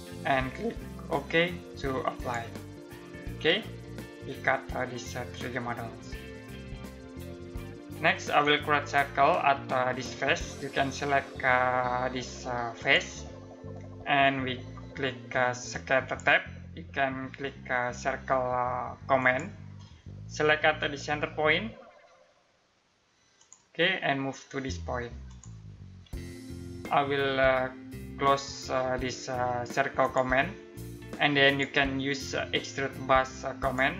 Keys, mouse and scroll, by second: 1.7 click, 3.0 middle click, 12.4 click, 15.3 click, 18.8 click, 23.0 click, 29.6 click.